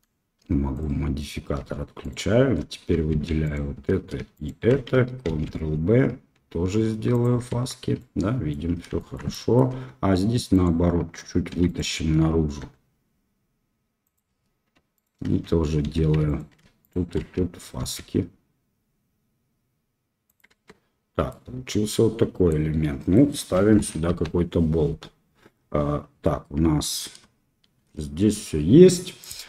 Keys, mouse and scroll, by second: 0.7 click, 2.0 alt+shift+click, 3.1 2, 4.3 alt+shift+click, 5.2 ctrl+b, 7.6 Tab, 7.9 middle click, 8.9 shift+middle click, 9.2 middle click, 9.6 Tab, 10.5 click, 11.5 3, 12.5 e, 14.9 alt+click, 15.8 2, 16.2 alt+click, 16.8 alt+shift+click, 17.7 ctrl+b, 20.6 Tab, 21.2-22.5 middle drag, 23.1 middle drag, 23.6 KP_1, 29.1-29.4 drag.